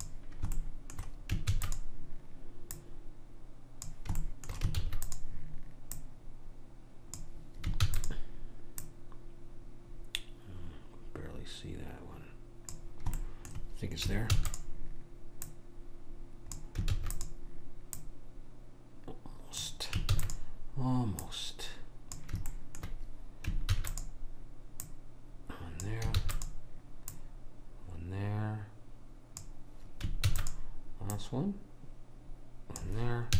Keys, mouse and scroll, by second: 0.7 middle click, 1.5 shift+d, 2.8 click, 4.2 right click, 4.6-5.9 middle drag, 4.9 shift+d, 5.9 click, 8.0 shift+d, 8.9 click, 13.2-15.5 middle drag, 14.3 shift+d, 15.5 click, 17.0 shift+d, 18.0 click, 20.1 shift+d, 21.3 click, 22.6 right click, 23.0 middle click, 23.8 shift+d, 24.9 click, 26.2 shift+d, 27.2 click, 30.3 shift+d, 31.2 click.